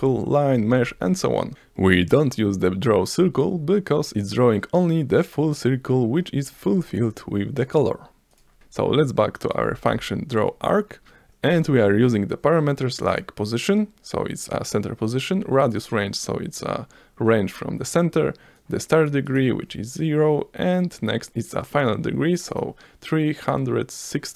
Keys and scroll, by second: 0.5 Return, 0.5 Up, 0.6 Right, 4.4 F5, 9.7 BackSpace.